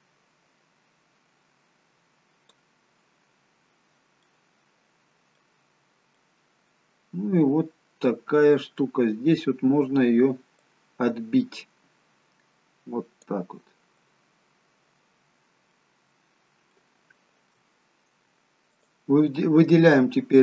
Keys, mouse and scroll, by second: 3.4-4.0 scroll up 2, 4.0 scroll down 2, 4.3 middle click, 5.7 scroll down 1, 6.3 middle click, 10.7 click, 14.1 middle click, 16.1-16.6 scroll up 2, 16.8 shift+middle click, 18.9 click.